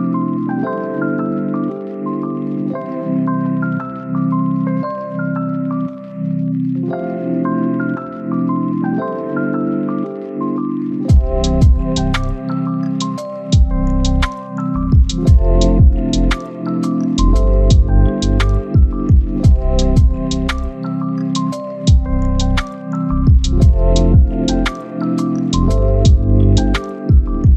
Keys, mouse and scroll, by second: 0.2-0.6 scroll down 1, 0.6 scroll up 1, 0.9-1.3 scroll down 1, 1.5 click, 1.7 right click, 2.3 scroll up 1, 2.5 right click, 3.5-4.1 scroll down 2, 3.8 right click, 4.1 scroll up 1, 4.3 right click, 4.6 scroll down 1, 4.8 scroll up 1, 4.9 right click, 5.1 scroll down 1, 5.2 scroll up 1, 5.3 right click, 5.7 scroll up 1, 5.9 right click, 6.2 scroll up 1, 6.4 right click, 6.5 scroll down 1, 6.6 right click, 6.9 scroll up 1, 7.1 right click, 7.6-8.3 scroll up 1, 8.3 scroll down 1, 8.5 right click, 8.8-9.4 scroll up 1, 10.0 right click, 10.6-10.9 scroll down 1, 21.6 scroll up 1, 21.7 right click, 21.8 click, 22.0 scroll down 1, 22.0 right click, 22.7 scroll down 1, 22.8 scroll up 1, 23.0 right click, 24.0 scroll up 1, 24.2 right click, 24.4 scroll down 1, 24.6 scroll up 1, 24.7 right click, 25.2 scroll up 1, 25.5 click, 25.8 scroll down 1, 25.9 scroll up 1, 26.4 click, 26.6 scroll down 1, 26.7 scroll up 1, 26.9 click.